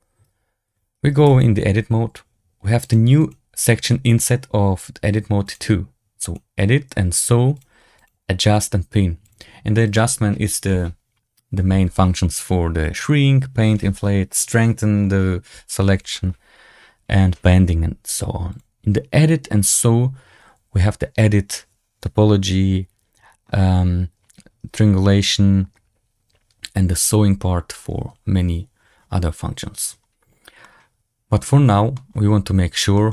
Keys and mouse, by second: 1.2 Tab, 2.7 click, 5.4 click, 6.2 click, 7.5 click, 7.9 click, 9.2 click, 9.8 click, 18.0 click, 18.4 click, 30.5-31.8 middle drag, 32.5 a, 32.6 a, 32.8 shift+middle click.